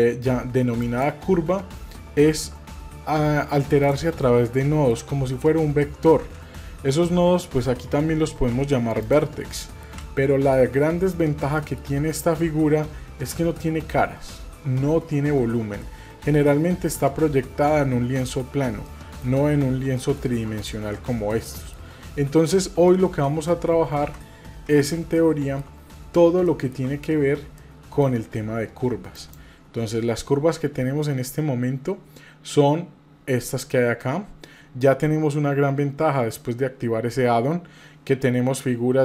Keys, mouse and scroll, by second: 2.5 g, 4.4-4.9 shift+middle drag, 5.1-5.6 middle drag, 5.8 shift+middle click, 6.5-8.2 middle drag, 8.5 g, 9.6 middle click, 10.0-10.6 shift+middle drag, 10.9-11.3 scroll up 1, 11.3 scroll down 1, 11.5 middle click, 15.8-17.0 middle drag, 17.6-18.6 middle drag, 18.8-19.2 middle drag, 20.0 middle click, 20.6 click, 21.2-21.5 scroll down 2, 21.5 middle click, 23.0 a, 24.0 Delete, 25.1-25.6 shift+middle drag, 25.8-26.3 scroll up 2, 26.5-26.8 shift+middle drag, 27.0-27.4 scroll up 2, 27.6-28.0 shift+middle drag, 29.1-39.0 drag.